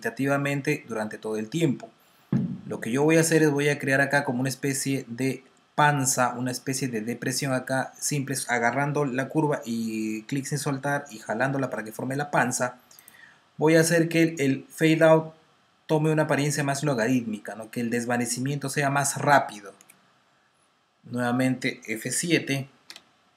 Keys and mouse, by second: 3.4 click, 12.9 click, 22.8 F7.